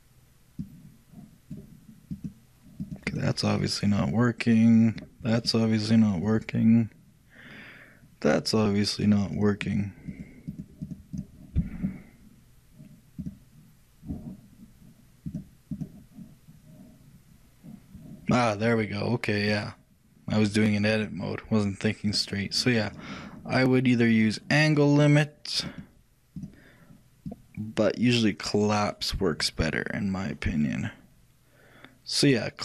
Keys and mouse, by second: 0.7-8.2 drag, 9.1-13.0 drag, 13.3-15.1 drag, 15.4-17.6 drag, 19.6-21.3 drag, 25.7-29.2 drag.